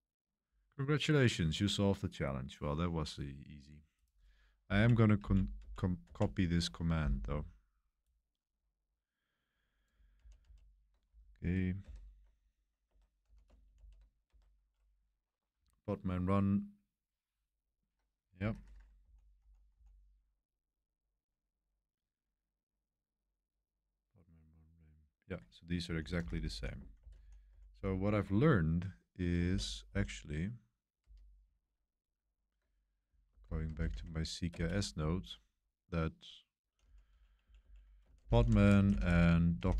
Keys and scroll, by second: 4.7 Page_Up, 5.2 Page_Up, 5.5 Page_Up, 6.0 Page_Up, 10.1 super+c, 10.4 super+c, 11.8 super+7, 12.8 Escape, 13.2 typing, 13.4 Return, 13.7 super+v, 14.2 ⟲, 14.6 0, 18.3 ⟲, 19.0 k, 19.7 k, 25.6-28.0 typing, 29.4-31.0 typing, 33.2 super+o, 33.4-39.7 typing, 34.5 Return.